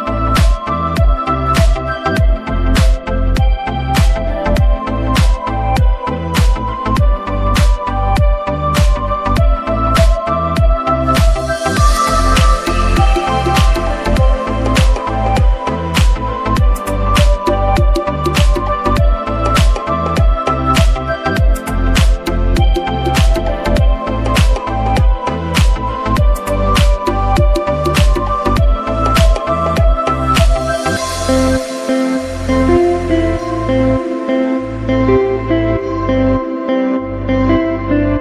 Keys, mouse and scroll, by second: 6.9 shift+Num_Lock, 7.0-9.6 typing, 11.7 click, 16.9 super+Num_Lock, 19.4 Tab, 23.7 click, 27.0 click, 29.5 click, 33.6 click.